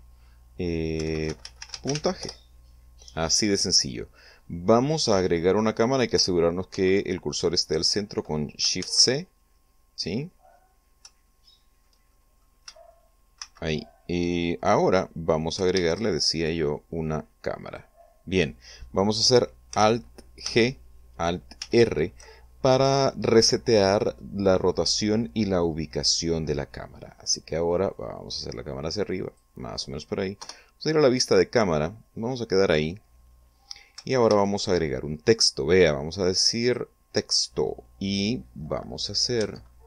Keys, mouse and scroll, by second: 1.3-3.0 typing, 5.0-5.5 scroll down 4, 5.5 scroll up 2, 7.2 ctrl+c, 8.0-8.3 scroll up 2, 9.3 shift+c, 10.5-10.8 scroll down 2, 11.0 scroll up 2, 11.8 shift+middle click, 13.9 shift+c, 16.2 shift+a, 18.2 click, 21.0 alt+g, 22.2 alt+r, 26.7-27.1 scroll down 2, 28.5-30.1 drag, 30.9 0, 32.8 scroll down 2, 33.3 scroll up 2, 34.8 shift+a, 37.2 click.